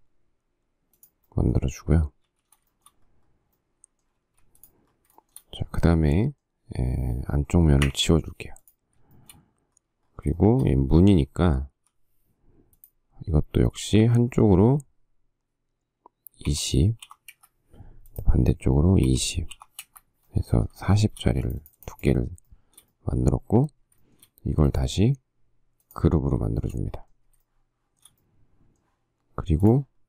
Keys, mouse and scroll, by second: 2.5 shift+s, 3.1 shift+middle click, 4.4 space, 5.4 shift+middle click, 8.1 Delete, 9.4 shift+middle click, 10.6 shift+middle click, 12.0 p, 16.7 2, 17.3 0, 17.5 Return, 19.4-19.8 typing, 20.1 Return, 21.1 shift+middle click, 21.4 space, 22.4 shift+scroll, 22.7 shift+middle click, 24.2 shift+middle click, 26.7 shift+middle click, 27.7 shift+middle click, 28.2 shift+scroll.